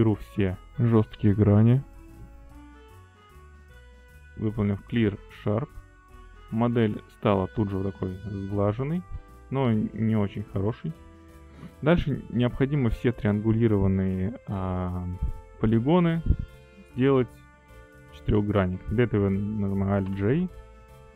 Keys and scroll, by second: 0.0 ctrl+e, 20.7 alt+j.